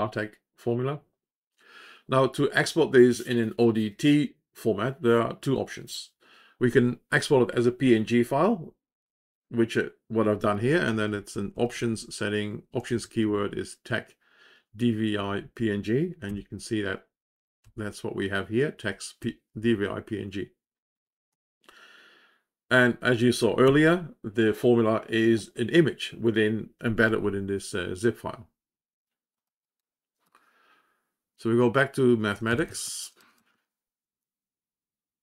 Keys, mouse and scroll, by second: 11.9 Down, 34.7 Up.